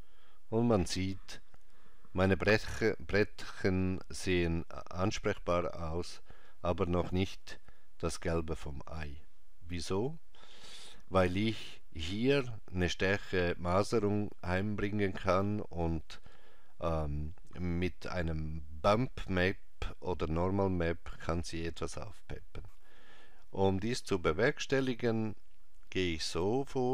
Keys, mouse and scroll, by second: 8.1 middle click, 10.0 click, 22.3-22.7 scroll down 1, 24.1 middle click, 24.1-26.2 scroll down 4.